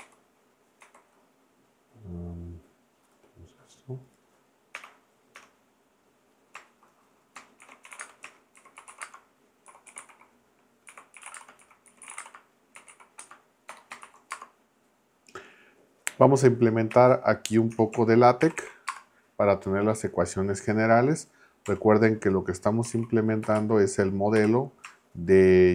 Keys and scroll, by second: 4.7 Return, 5.4 Return, 7.4-14.3 typing, 16.9 Return, 18.4 shift+4, 18.9 space, 21.7 \, 22.9 h, 23.4 BackSpace, 23.6 a, 24.4 t.